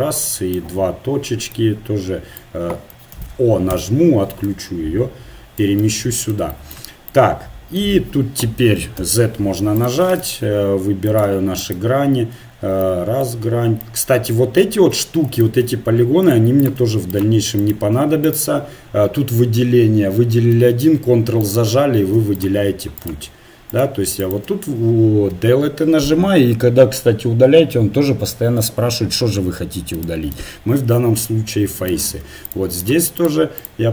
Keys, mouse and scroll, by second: 3.1 ctrl+z, 3.9 o, 4.4-6.6 drag, 9.0 z, 9.8 click, 10.3 ctrl+Tab, 11.2 click, 11.4-15.4 right drag, 15.4 ctrl+Tab, 16.9-19.9 right drag, 21.4-28.5 right drag, 25.3 Delete, 31.9-33.9 right drag.